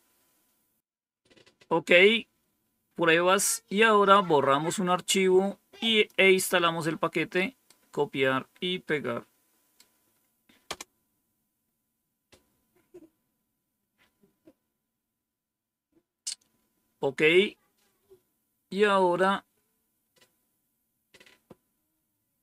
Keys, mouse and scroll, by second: 2.8 scroll down 2, 5.0-6.0 drag, 6.8 right click, 8.8 right click, 10.6 Return, 16.8 scroll down 2, 17.4-18.1 scroll down 2, 18.1 scroll down 1.